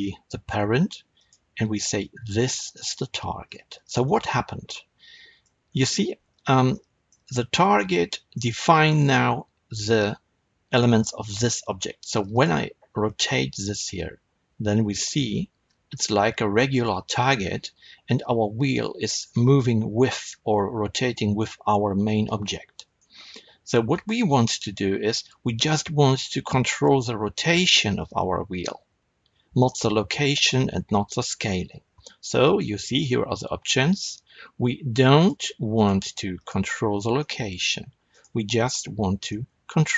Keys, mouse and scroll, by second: 3.5-3.9 scroll down 1, 3.9-4.6 middle drag, 5.1-12.2 middle drag, 5.6-6.6 scroll up 2, 12.2 click, 13.5 r, 22.9 right click, 23.8 click, 35.1 click, 35.7 click, 36.3 click, 37.1-38.0 middle drag, 38.0 click, 38.9 r.